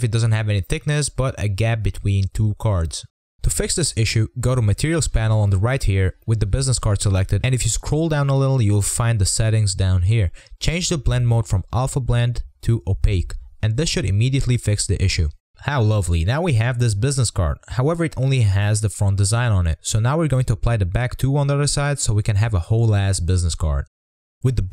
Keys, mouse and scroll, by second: 0.8 click, 1.2-4.7 middle drag, 4.7 click, 6.2 click, 7.3-8.9 scroll down 33, 8.5 click, 9.3 click, 9.7 scroll up 1, 9.9-11.2 scroll down 5, 11.2-14.5 drag, 15.0 click, 15.4-18.4 middle drag, 18.8-19.1 scroll down 2, 19.1 scroll up 2, 19.4-20.2 middle drag, 20.2-20.6 drag, 20.6-21.5 scroll up 2, 21.5 middle click, 22.1-23.0 scroll down 3, 23.0 Tab.